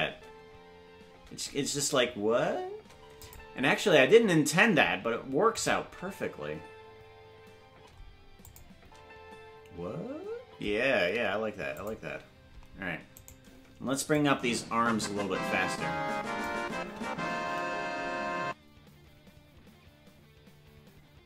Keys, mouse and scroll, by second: 0.1 space, 3.2 click, 3.2 space, 4.6 space, 5.6 click, 5.8 space, 7.9 space, 8.4 click, 8.8 space, 10.5 space, 11.8 click, 13.3 right click, 14.1-16.5 drag, 16.7 space, 18.0 space.